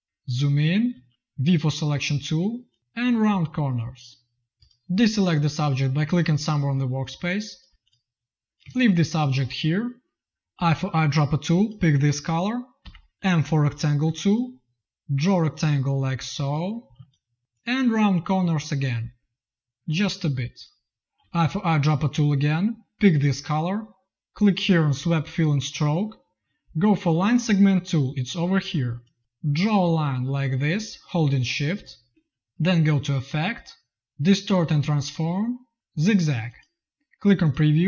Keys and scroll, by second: 0.0 z, 0.8 v, 6.7 z, 7.6 v, 10.4 i, 12.7 m, 16.7 v, 16.8 z, 21.1 i.